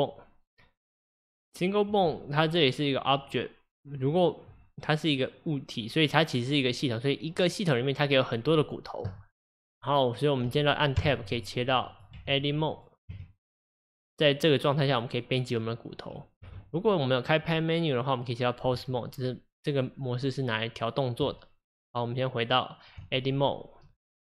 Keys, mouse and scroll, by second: 12.0 click, 13.2 Tab, 18.7 Tab, 23.0 Tab.